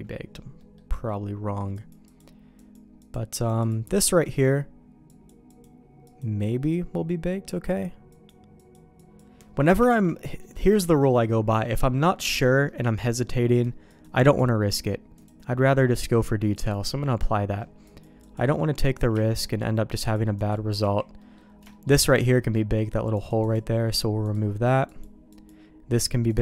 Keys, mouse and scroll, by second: 0.6 middle click, 1.8 click, 2.1 click, 3.1-5.3 drag, 5.6 click, 6.1-8.7 drag, 9.1 click, 9.6 middle click, 9.9 shift+middle click, 10.4 middle click, 14.0-16.8 drag, 17.9 click, 18.3 click, 19.1 z, 20.1 click, 20.8 z, 21.2 middle click, 21.7 shift+middle click, 23.2 click, 24.2 click, 24.9 click.